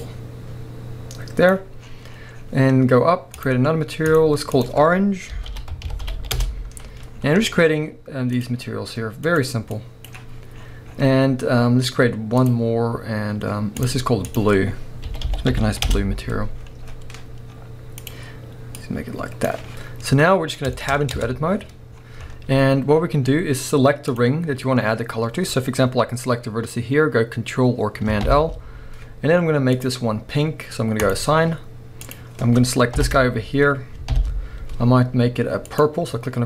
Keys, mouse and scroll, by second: 1.8-3.4 scroll up 1, 3.4-8.4 drag, 6.4 Return, 7.1-8.3 scroll down 1, 10.6-12.4 scroll up 1, 12.4-18.1 drag, 15.9 Return, 16.6-18.0 scroll down 1, 20.3-20.7 scroll down 1, 20.7-24.1 shift+middle drag, 21.2 Tab, 21.9-22.3 scroll up 1, 24.1 click, 28.2 ctrl+l, 29.7 click, 31.0-32.1 drag, 32.9 ctrl+;, 34.1 ctrl+l, 35.7 click.